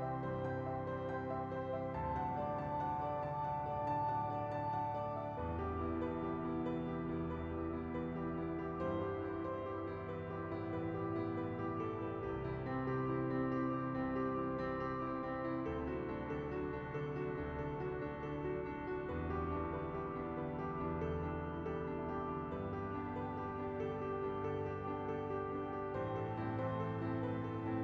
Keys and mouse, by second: 0.0 Tab, 0.9 Tab, 2.0 /, 2.1 middle click, 2.4 shift+middle click, 2.6 Tab, 2.9 middle click, 3.4 click, 3.8 middle click, 5.2 click, 6.0 Tab, 6.4 right click, 7.5-8.5 right drag, 8.6-10.0 shift+right drag, 10.2 ctrl+z, 10.7 KP_1, 11.3 middle click, 11.7 shift+middle click, 12.5 shift+middle click, 13.3 shift+middle click, 14.0 shift+middle click, 14.2 middle click, 15.0 ctrl+a, 16.3 middle click, 16.5 middle click, 16.9 Tab, 18.5 ctrl+r, 20.1 Tab, 20.3 Tab, 20.7 alt+click, 21.7 Tab, 21.8 click, 22.1 ctrl+z, 22.1 3, 22.8 p, 23.8 x, 24.5 Tab, 24.7 click, 25.5 Tab, 26.0 3, 26.1 click, 26.5 l.